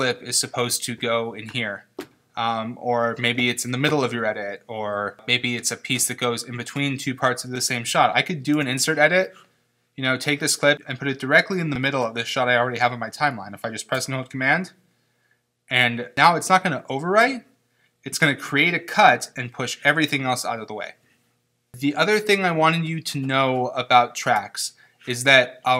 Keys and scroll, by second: 8.5 super+z, 21.6 super+z.